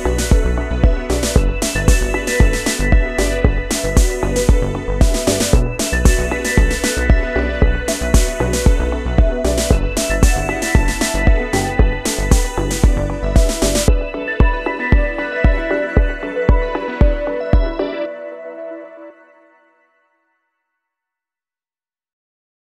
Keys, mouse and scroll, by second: 2.8 ctrl+z, 3.6 ctrl+z, 18.0 click.